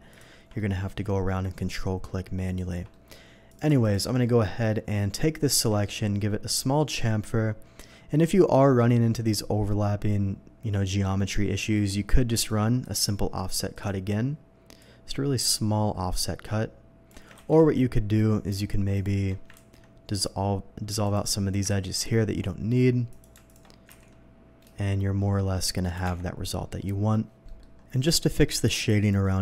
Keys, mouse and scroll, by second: 0.1 ctrl+click, 0.5 ctrl+middle click, 1.5 ctrl+click, 2.4 ctrl+click, 2.9 ctrl+middle click, 3.5 ctrl+click, 3.8 alt+click, 4.2 alt+middle click, 4.8 scroll up 1, 5.5 ctrl+b, 6.2 scroll down 1, 11.7 Escape, 12.8 y, 13.7 click, 14.8-17.1 drag, 17.8 ctrl+z, 18.9 alt+click, 19.5 ctrl+x, 21.0 alt+click, 22.3 ctrl+x, 22.3 middle click, 23.1 click, 23.5 alt+click, 23.9 ctrl+b, 25.8 shift+click, 26.0 Tab, 26.7 middle click, 27.4 middle click, 27.8 scroll up 1.